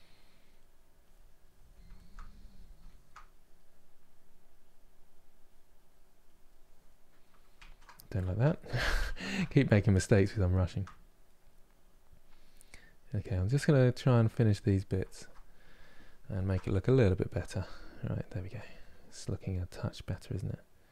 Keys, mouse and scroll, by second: 1.6-4.1 shift+middle drag, 4.1-7.3 drag, 7.3 ctrl+z, 7.9 ctrl+z, 8.4 ctrl+z, 8.6 ctrl+z, 9.1-11.2 shift+middle drag, 11.2-14.7 drag, 14.7-17.0 ctrl+middle drag, 17.0 KP_Divide, 17.4-20.9 middle drag.